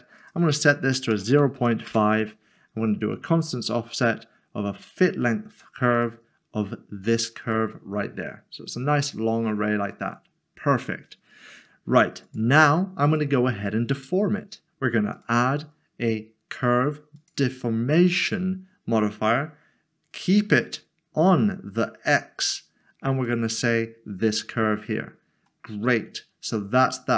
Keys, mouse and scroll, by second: 1.2-1.6 typing, 1.9 Return, 6.4 click, 8.4 scroll down 1, 9.3 scroll down 1, 9.4-11.5 scroll up 1, 12.2-14.9 scroll up 1, 14.9 click, 15.2 click, 17.3 click, 23.2 click, 25.2 scroll down 1, 26.1 scroll up 1.